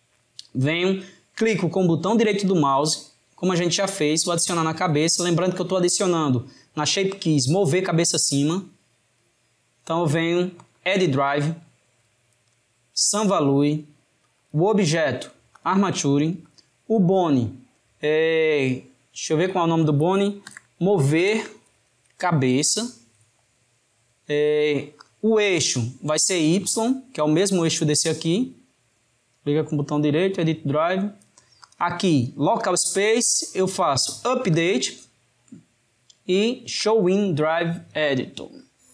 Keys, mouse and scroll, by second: 2.0-3.0 drag, 4.0-7.1 right drag, 9.2-12.2 right drag, 28.7-31.7 right drag.